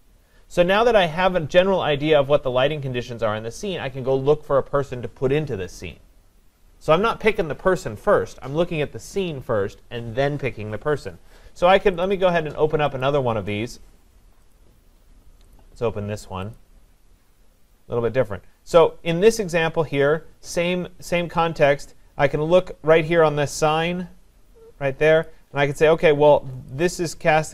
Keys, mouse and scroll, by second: 12.1 click, 13.1 click, 14.6 click, 15.6 click, 16.6 click, 25.2 click.